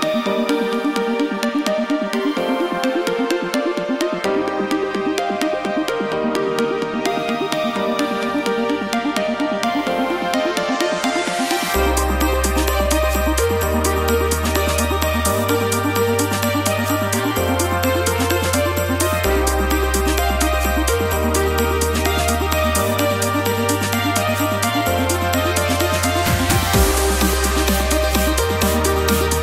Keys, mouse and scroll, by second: 1.0 click, 1.8 click, 8.6 click, 11.5 click, 13.9 click, 24.1 click.